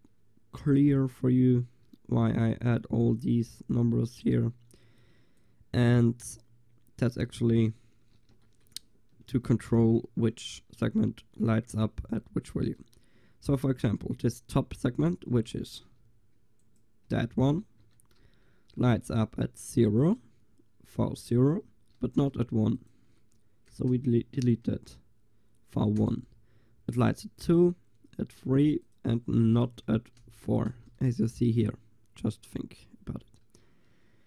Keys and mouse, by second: 3.1-7.3 drag, 7.3-13.8 middle drag, 13.8-15.6 drag, 15.6 Tab, 15.9 a, 17.1 l, 17.9 Tab, 18.1-19.2 drag, 19.7 middle click, 20.6 right click, 21.4 right click, 24.0 BackSpace, 28.6-32.9 drag, 29.7 BackSpace.